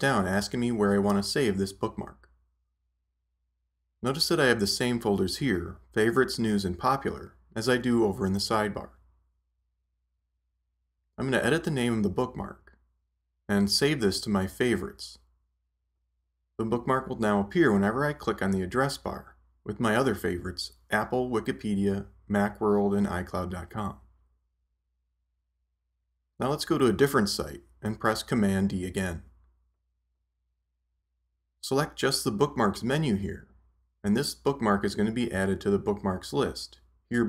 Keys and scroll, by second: 14.1 BackSpace, 29.1 super+d.